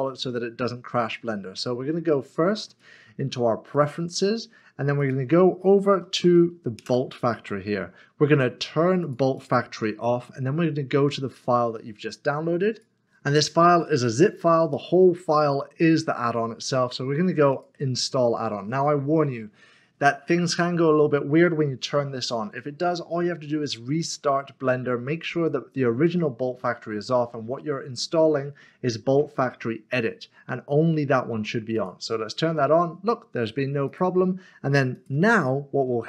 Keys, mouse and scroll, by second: 2.7 shift+middle click, 6.1-7.1 typing, 9.0 click, 9.4 double click, 12.7 click, 13.0 double click, 15.7 click, 17.5 click, 31.7 click, 33.9 click.